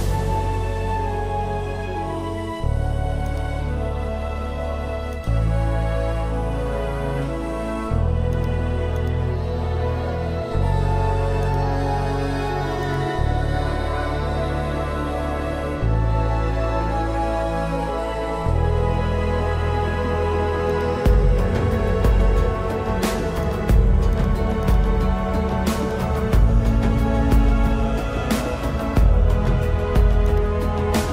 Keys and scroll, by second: 2.6 ctrl+-, 3.0 space, 3.6 ], 11.0 space, 19.0 ctrl+-, 20.1 space, 24.4 space, 25.9 ctrl+alt+z.